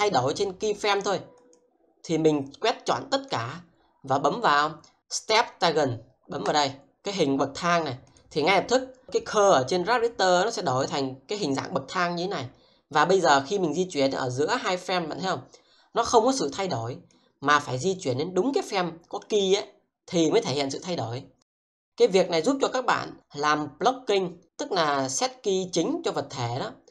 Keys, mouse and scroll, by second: 1.4 double click, 2.4 click, 13.1 click, 17.2 double click, 22.2 click.